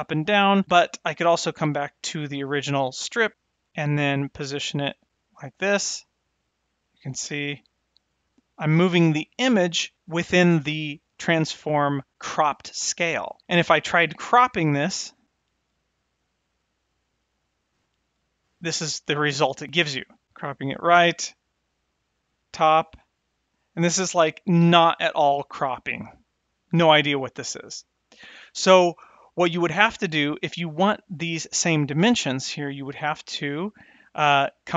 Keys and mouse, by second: 1.4 click, 3.9-9.9 drag, 10.7 click, 15.9 click, 16.5 click, 17.2-21.8 drag, 22.3-23.7 drag, 24.2-25.9 drag, 34.6 click.